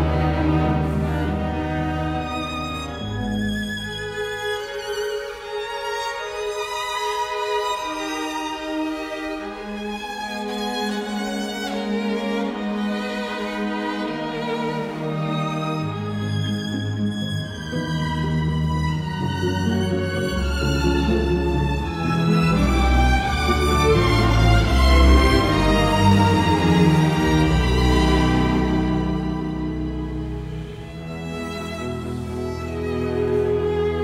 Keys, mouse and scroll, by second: 7.2 ctrl+z, 10.3 space, 11.6 Escape, 12.4 space, 27.3-28.5 typing, 33.3 Escape.